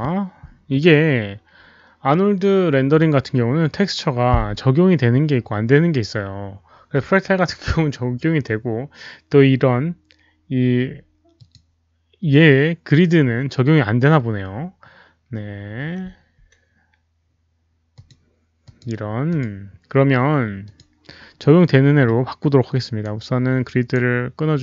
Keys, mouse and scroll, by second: 11.3 click, 13.2 click, 16.1 Escape, 16.1 click, 17.9 click, 18.0 Escape, 18.6 click, 19.2 click, 20.6 click, 21.9-22.2 scroll down 1, 22.1 Escape, 22.9-24.3 right drag.